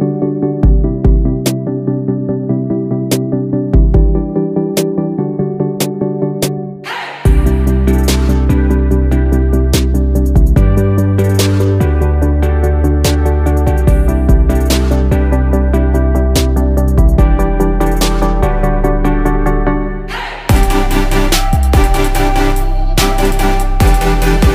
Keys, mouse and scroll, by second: 4.5 ctrl+z, 10.4 right click, 19.6 ctrl+z, 20.4 ctrl+z, 22.4 ctrl+z.